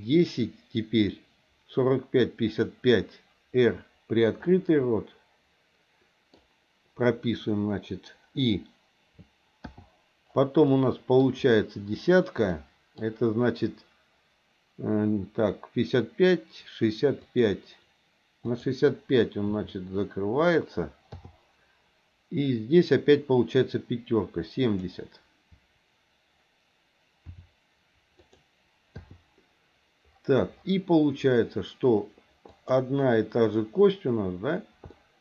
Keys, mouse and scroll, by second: 2.6 click, 4.5-6.3 middle drag, 9.7 i, 10.6 middle click, 12.5 middle click, 17.3 click, 18.5 click, 19.5 r, 21.1 i, 24.6 click, 27.3 r, 29.0 i, 32.5 click, 34.9-35.2 shift+middle drag.